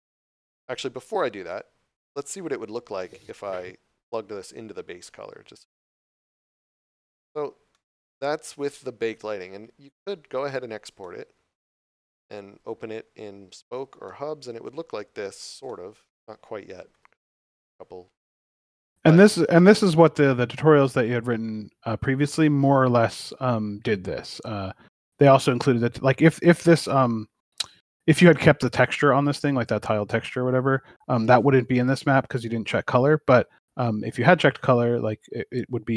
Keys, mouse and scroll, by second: 1.0 scroll down 1, 4.0 click, 7.7 middle click, 9.8 scroll up 1, 11.0 middle click, 12.7 scroll down 1, 14.0 shift+middle click, 19.1 scroll up 1, 19.9 middle click, 24.9 shift+middle click, 25.7 a, 26.4 scroll down 1, 27.2 scroll up 1, 27.3 middle click, 30.1 right click, 30.7 middle click, 31.7 scroll up 1, 34.9 scroll down 1.